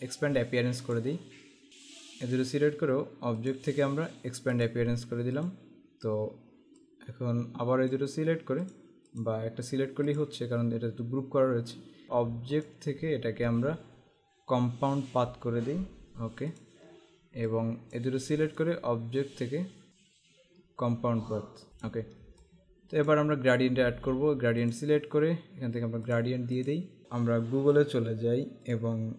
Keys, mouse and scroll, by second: 1.0 click, 2.0 click, 3.5 click, 4.8 click, 6.9 click, 12.0 click, 12.6 click, 16.1 click, 18.4 right click, 19.9 click, 21.7 click, 24.8 click, 26.3 click, 28.8 click.